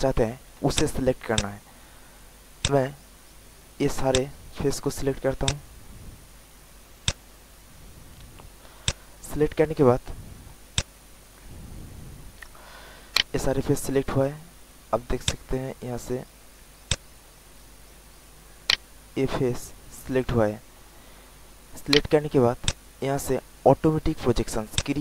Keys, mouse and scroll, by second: 0.2 alt+middle click, 0.7 alt+click, 1.2 alt+click, 2.5 alt+click, 4.0 alt+click, 5.4-6.5 alt+drag, 7.0-8.5 drag, 8.9 alt+click, 9.5 alt+right click, 10.2 alt+middle click, 10.7 alt+click, 13.1 alt+right click, 13.6 alt+middle click, 15.2-16.6 drag, 16.8 alt+click, 17.8 alt+middle click, 18.2 alt+click, 18.6 alt+right click, 19.2 alt+middle click, 21.9 alt+right click, 22.6 alt+click, 23.1 alt+middle click, 24.7-25.0 drag.